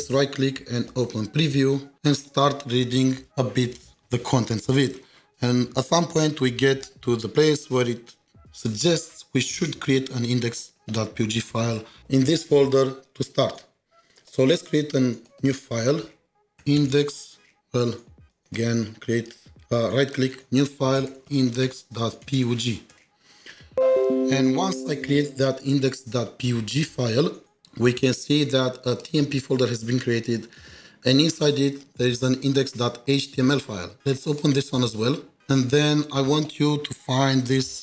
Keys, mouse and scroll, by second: 6.5 right click, 6.5 ctrl+shift+4, 10.4 ctrl+shift+4, 10.5 ctrl+shift+4, 10.8 ctrl+shift+7, 11.1 ctrl+shift+2, 14.2 right click, 16.5-18.4 typing, 16.6 right click, 19.2 right click, 21.0-22.9 typing, 21.1 right click, 34.2 Return, 34.4 double click, 37.2 click, 37.2 ctrl+shift+4.